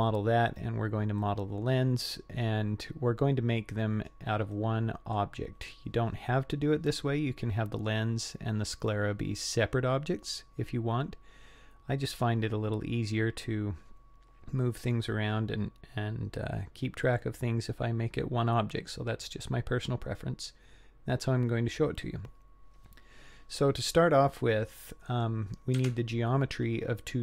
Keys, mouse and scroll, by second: 1.2-4.1 middle drag, 4.6-5.2 middle drag, 23.6-25.2 middle drag, 25.8 Tab.